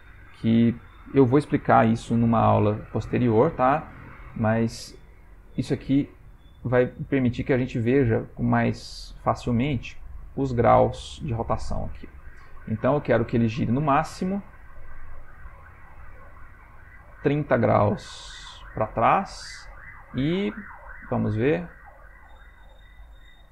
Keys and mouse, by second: 5.2 r, 10.0 r.